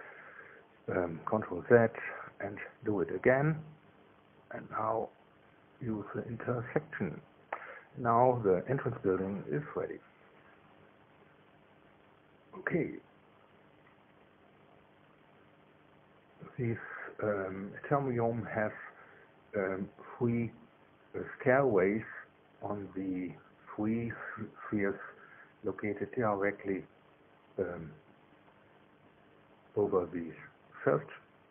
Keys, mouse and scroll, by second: 1.2 click, 1.2 space, 2.0 space, 2.8 click, 3.5 shift+click, 6.3 click, 7.5 middle click, 8.8-11.5 middle drag, 14.7-16.5 middle drag, 17.3-19.7 middle drag, 23.9 KP_1.